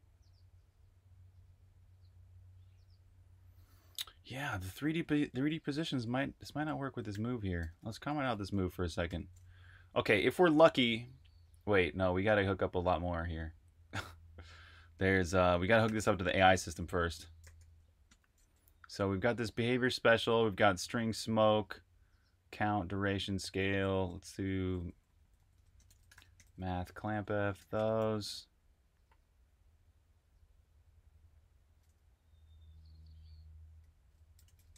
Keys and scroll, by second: 4.8 Escape, 4.9-11.0 typing, 12.1-12.8 typing, 15.5-18.7 typing, 20.4-21.4 typing, 23.1-27.9 typing, 32.0-32.7 typing, 34.1-34.7 typing.